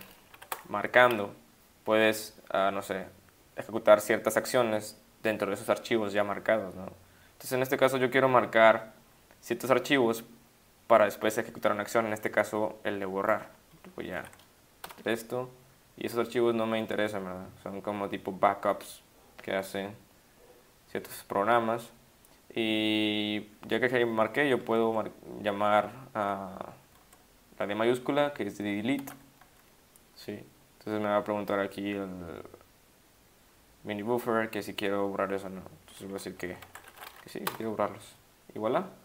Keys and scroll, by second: 0.4-1.8 typing, 14.3 ~, 14.8 Return, 24.8 Caps_Lock, 29.0 shift+d, 36.6-37.5 typing.